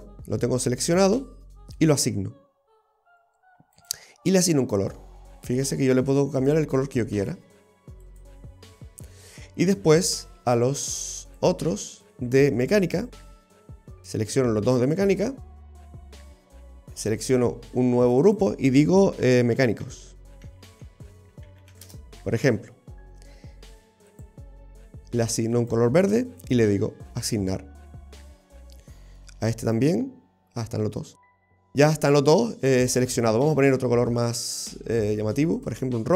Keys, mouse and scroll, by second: 1.8 click, 3.8 click, 6.4 click, 9.6-11.4 scroll down 1, 11.4 click, 11.4-12.1 scroll down 1, 12.1 middle click, 13.1 right click, 14.0 shift+right click, 17.3 click, 18.2 click, 18.3 click, 24.2 click, 26.5 click, 27.3-27.9 scroll up 2, 27.9 middle click, 29.7 right click, 30.7 scroll down 2, 31.0 middle click, 32.9-33.8 scroll up 1, 34.5 click.